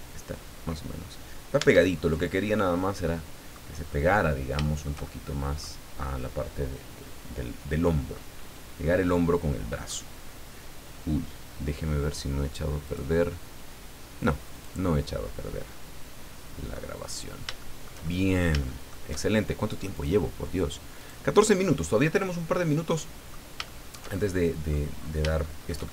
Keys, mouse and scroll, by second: 1.6 Tab, 2.0 middle click, 3.0 middle click, 3.7-4.3 scroll down 4, 4.6-5.7 shift+middle drag, 8.5 scroll down 2, 9.1 middle click, 12.9 click, 14.5 click, 15.7-16.9 middle drag, 17.0-17.3 scroll up 1, 17.6-18.6 shift+middle drag, 18.7 shift+middle click, 19.9 click, 21.0 click, 21.8-22.1 scroll down 1, 22.2-23.5 middle drag, 23.6 shift+middle click, 24.5 click, 25.0 scroll up 1, 25.4-25.9 shift+middle drag.